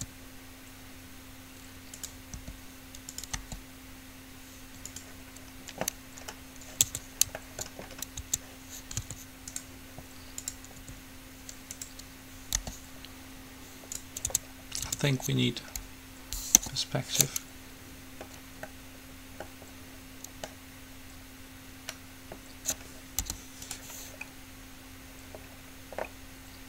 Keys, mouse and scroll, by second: 0.0 s, 2.6 r, 3.6 g, 7.0 Tab, 8.4 Tab, 9.2 s, 10.7-12.4 drag, 11.0 s, 12.7 g, 14.4 Tab, 15.0 Tab, 16.7 KP_5, 23.4 u, 24.4-26.6 middle drag.